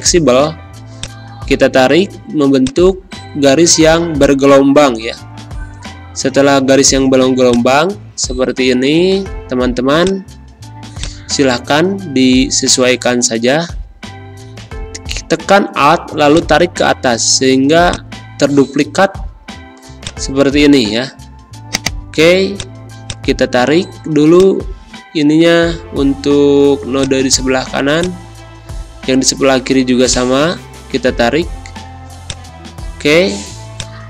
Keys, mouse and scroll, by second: 2.3 space, 2.6 click, 2.8 space, 4.1-7.1 drag, 7.1 space, 7.4 click, 7.5 space, 10.2 click, 10.7 space, 10.9 click, 11.2 space, 12.7 click, 13.1 space, 16.3-17.7 alt+drag, 17.7 space, 17.9 click, 18.2 space, 18.9 a, 20.0 click, 20.9 ctrl+z, 21.7 click, 24.1 space, 24.3 click, 24.6 space, 26.9 click, 27.7 space, 27.9 click, 28.2 space, 30.0-33.4 drag, 33.4 space, 33.7 click, 33.9 space.